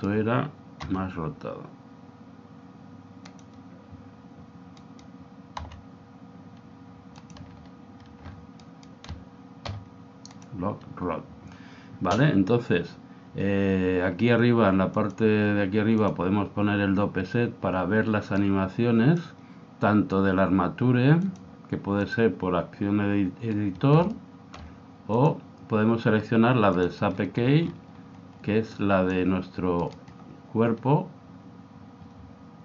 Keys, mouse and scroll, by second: 1.0 r, 4.8-6.8 right drag, 5.8 r, 8.7-10.6 right drag, 9.6 i, 14.9 click, 18.4 click, 21.3 click, 24.1-26.7 middle drag, 25.1 click, 27.6-29.8 middle drag, 28.7 click, 29.8-31.7 right drag.